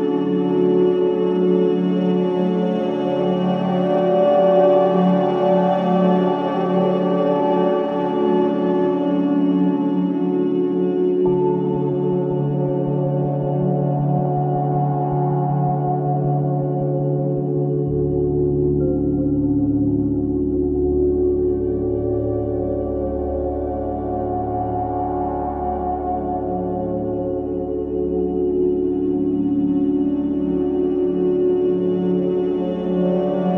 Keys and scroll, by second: 4.3 ctrl+z, 29.6 ctrl+z.